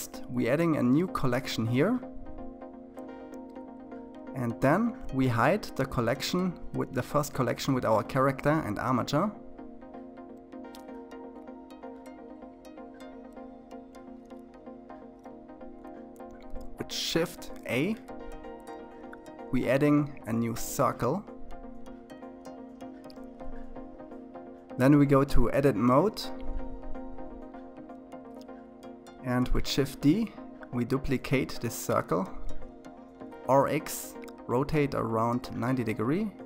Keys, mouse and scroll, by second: 5.6 click, 8.5-9.5 scroll up 5, 9.5-20.6 middle drag, 20.6 shift+a, 24.0-28.3 drag, 28.3 shift+d, 30.6 r, 33.8 shift+d.